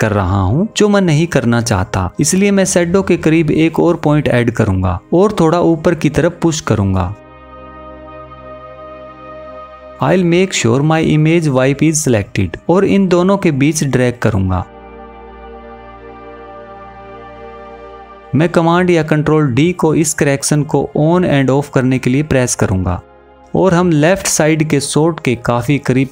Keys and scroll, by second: 18.6 super+d.